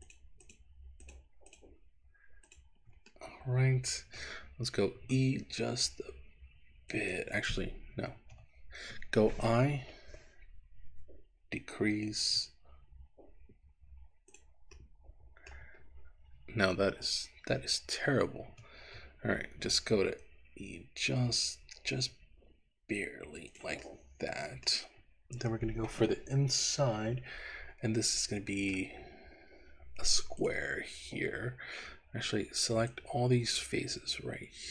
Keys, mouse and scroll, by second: 0.1 shift+click, 1.1 shift+click, 1.6 shift+click, 2.4 shift+click, 3.2 middle click, 5.0 e, 7.0 click, 8.2 ctrl+z, 9.8 i, 14.5 click, 14.8 middle click, 15.9-17.3 scroll up 1, 18.5 ctrl+z, 19.9 e, 23.6 click, 23.9 middle click, 27.5-28.1 scroll up 1, 28.1 middle click, 29.1 scroll down 2, 30.4 click, 32.9-34.7 drag.